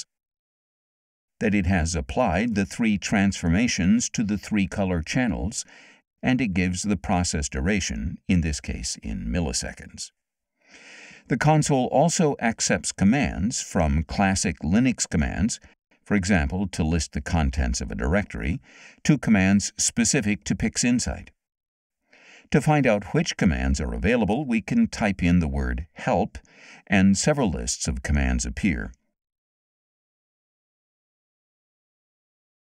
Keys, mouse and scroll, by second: 3.2-5.2 drag, 6.4-9.1 drag, 13.0 click, 16.9 l, 17.4 s, 19.2 Return, 25.6 h, 26.2 e, 26.6 l, 27.3 Return, 31.1-32.7 scroll up 9, 32.0 middle click.